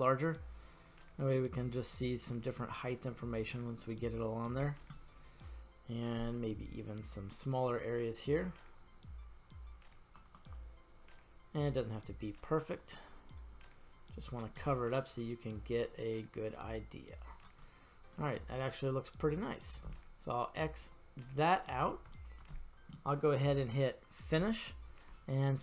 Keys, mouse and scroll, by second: 3.4 click, 5.0-5.5 middle drag, 6.2 f, 7.5-10.0 drag, 10.2 click, 10.4-14.4 drag, 14.6-15.2 middle drag, 15.8-17.5 drag, 17.6-18.2 middle drag, 17.6-18.2 scroll up 1, 18.4-18.8 scroll up 1, 18.9-19.4 scroll down 1, 19.4-19.7 shift+middle drag, 20.8 click, 21.7 middle click, 22.1 shift+middle drag, 24.2 click.